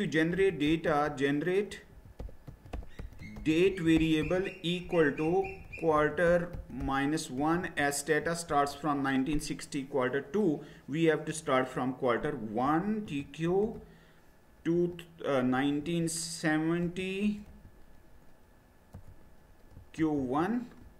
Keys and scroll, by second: 0.1-8.5 typing, 12.3-13.6 typing, 14.7-17.5 typing, 19.0-20.9 typing.